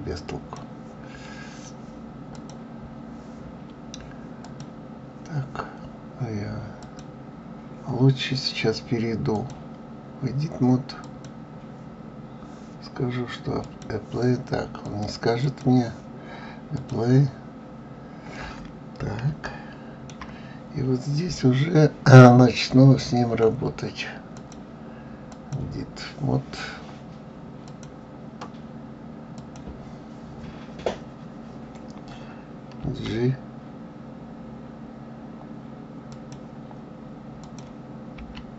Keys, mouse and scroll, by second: 2.3 click, 4.4 click, 6.8 click, 9.3-12.4 drag, 13.6-18.0 drag, 18.0 scroll up 2, 19.4-22.4 shift+middle drag, 24.3-27.4 drag, 27.7 click, 29.4 click, 37.4 click, 38.2 g.